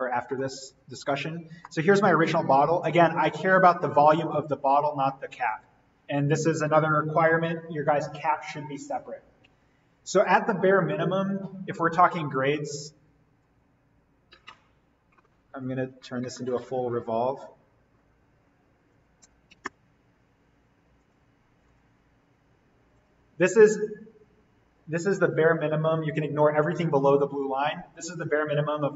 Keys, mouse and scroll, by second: 1.4 scroll down 1, 1.6 middle click, 2.4-3.3 scroll up 1, 3.3 click, 13.3-15.7 drag, 15.7 right click, 16.4 click, 18.9-20.2 typing, 21.0 click.